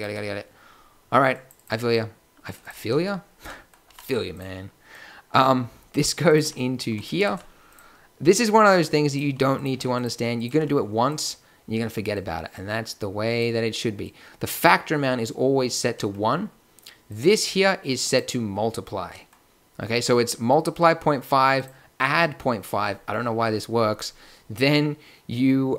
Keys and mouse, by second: 3.8 g, 6.4 g, 7.2 shift+d, 9.7 g, 10.5 g.